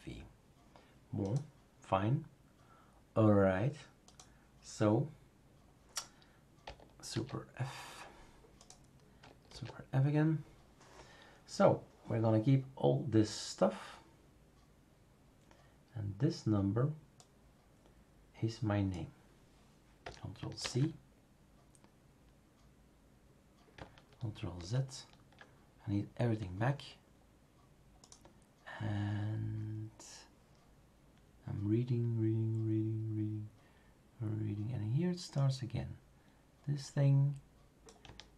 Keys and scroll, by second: 7.1 super+f, 9.5 super+f, 20.6 ctrl+c, 24.6 ctrl+z.